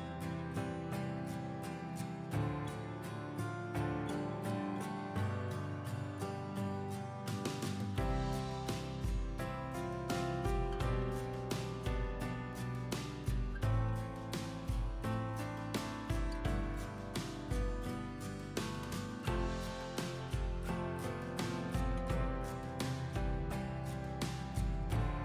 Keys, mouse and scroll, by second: 13.5 click, 15.7 alt+scroll up 1, 16.4 click.